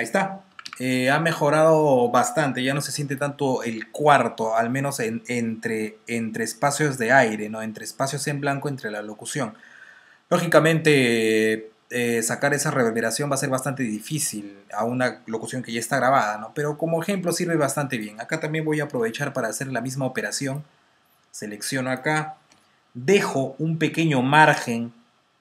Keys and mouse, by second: 0.4-1.3 typing, 3.0 typing, 4.4-5.1 typing, 17.8 click, 19.6 typing, 20.4 click, 21.6 typing, 22.4 Delete.